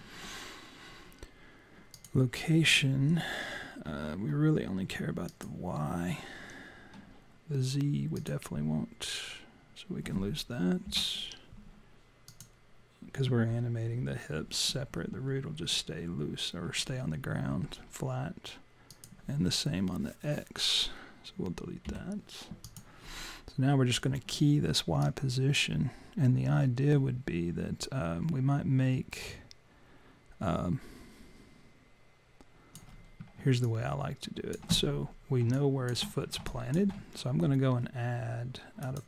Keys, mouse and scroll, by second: 1.9 click, 5.3 click, 8.1 click, 10.9 Delete, 12.3 click, 18.9 click, 21.9 Delete, 22.7 click, 25.0 click, 33.6 alt+click, 35.6 alt+click, 36.5 alt+click, 38.8 click.